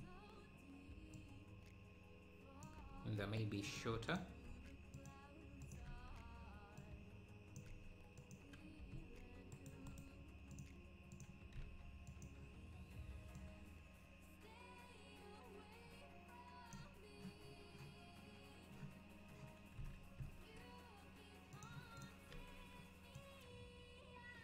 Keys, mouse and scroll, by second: 1.2 click, 3.7 click, 5.6 click, 7.6 click, 10.0-13.4 right drag, 13.4 click, 17.5-18.7 scroll up 1, 18.7-19.2 scroll up 1, 19.8 s, 22.0 click, 23.2 Tab, 23.2 click.